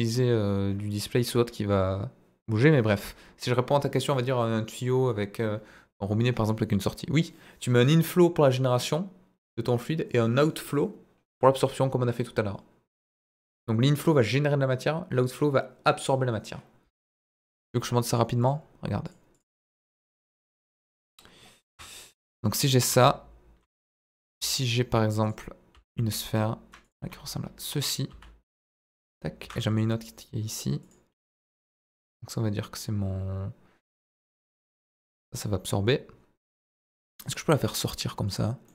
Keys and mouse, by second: 17.1 Tab, 18.2-18.5 drag, 19.0-20.5 drag, 20.7 middle drag, 21.7 KP_1, 23.0 z, 23.9 shift+a, 25.7 s, 26.8 click, 27.0 g, 27.8 click, 28.1 s, 28.5 click, 29.4 shift+d, 29.6 middle click, 30.8 click, 31.1 s, 34.0 click, 34.9 g, 38.2 click, 38.6 middle drag.